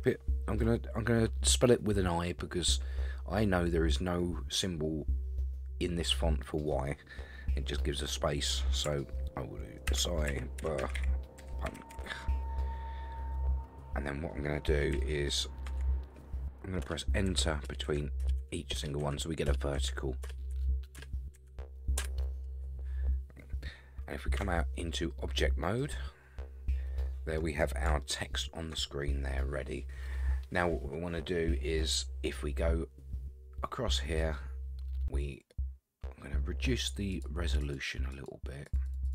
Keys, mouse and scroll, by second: 9.9-11.9 typing, 13.5-13.8 scroll down 6, 14.9-15.7 Left, 16.8 Return, 17.3 Right, 17.7 Return, 17.8 Right, 18.2 Return, 18.4 Right, 18.8 Return, 19.0 Right, 19.5 Return, 19.7 Right, 20.2 Return, 20.5 Right, 21.0 Return, 21.3 Right, 22.0 Return, 24.4 Tab, 25.2 scroll up 3, 25.8-27.4 middle drag, 28.0-28.8 shift+middle drag, 34.2-37.1 scroll up 3, 37.1 click, 37.6 click, 38.1 click, 38.7 click, 38.9 click, 39.0 click.